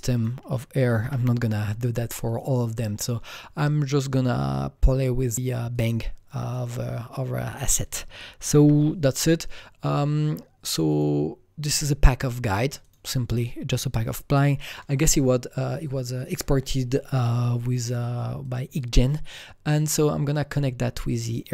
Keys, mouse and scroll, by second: 0.1 click, 1.0 click, 1.0 u, 2.2-5.7 drag, 8.5 typing, 10.9 click, 10.9 typing, 11.8 click, 12.9 click, 14.4-17.3 drag, 17.5-19.8 drag, 19.8-21.5 drag.